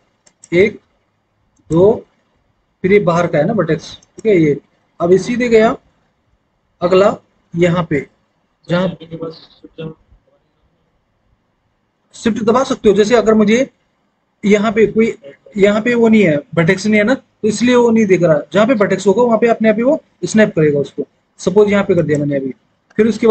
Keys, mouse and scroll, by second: 0.1 click, 1.4 click.